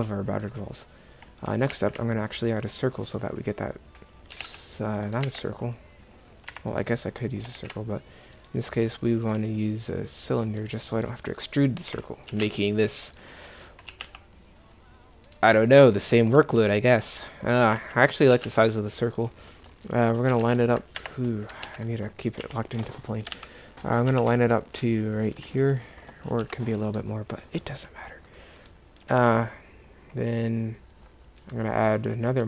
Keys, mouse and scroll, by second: 1.8 shift+a, 4.4 g, 5.3 ctrl+z, 6.5 Delete, 7.6 shift+a, 11.9 KP_1, 12.3 g, 13.9 g, 17.8 KP_1, 18.4 g, 20.4 g, 21.7 ctrl+z, 22.5 KP_1, 23.4 z, 24.1 g, 26.5 z.